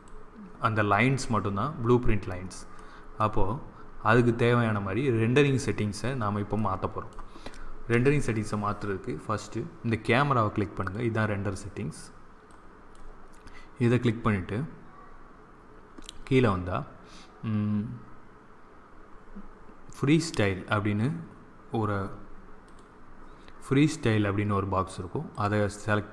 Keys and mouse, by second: 0.9 middle click, 10.7-14.2 drag, 14.2-17.2 middle drag, 25.2-26.1 drag.